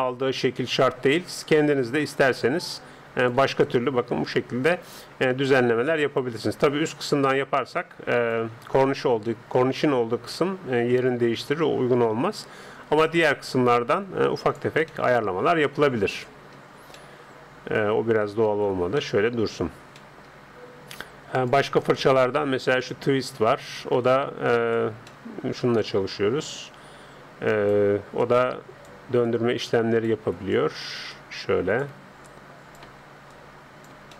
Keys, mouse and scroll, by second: 2.1-3.9 drag, 3.7-5.2 middle drag, 5.9-7.5 middle drag, 6.9-8.5 drag, 9.3-13.3 middle drag, 13.3-15.1 drag, 15.1-16.5 middle drag, 17.0-18.5 middle drag, 18.5 ctrl+z, 21.3-23.1 drag, 21.3 middle click, 24.1-25.7 drag, 25.2-27.4 middle drag, 25.8-27.6 drag, 28.2-34.1 drag, 30.1 Escape.